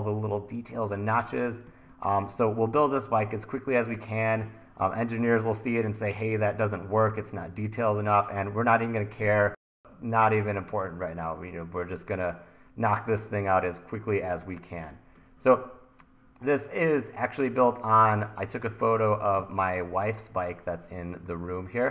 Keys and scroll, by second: 1.7 1, 10.7 1, 14.4 1, 18.7 1, 19.5 super+Tab.